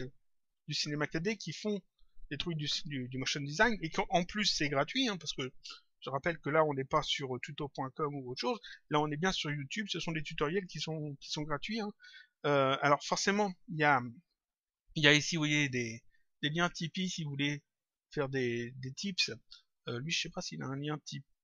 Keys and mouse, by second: 13.5 click, 16.8 click, 18.9 click, 21.0 click.